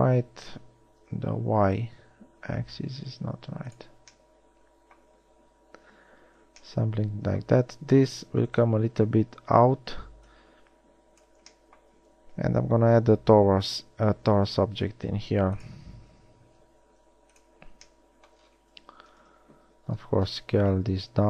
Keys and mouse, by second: 1.2 s, 8.9-10.6 drag, 10.6 middle click, 11.5 click, 12.5 shift+a, 16.7 shift+a, 19.6 KP_1, 20.9 s.